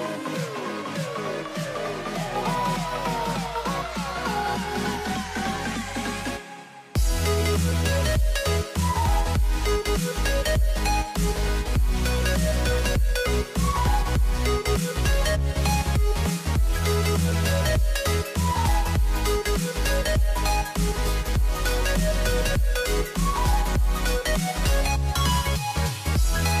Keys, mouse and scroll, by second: 2.0 shift+a, 6.1 s, 8.1 z, 10.2 g, 14.2-16.1 right drag, 16.1 g, 18.0-19.3 drag, 20.0 KP_Decimal, 21.9 g, 25.4 ctrl+r.